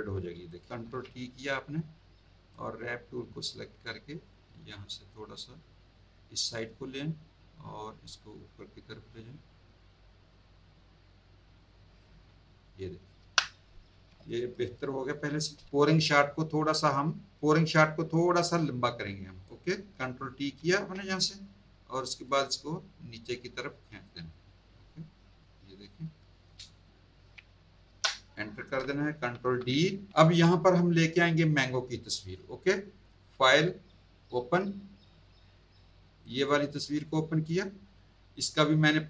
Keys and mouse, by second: 0.4 click, 0.7 ctrl+t, 1.3 right click, 2.5 click, 4.2 click, 7.8 click, 13.2 Return, 13.9 z, 14.3 alt+click, 15.9 click, 19.4 click, 20.6 ctrl+t, 22.3 click, 27.9 Return, 29.3 ctrl+d, 30.1 z, 30.6 click, 33.3 click, 34.2 click, 36.1 click, 38.8 click.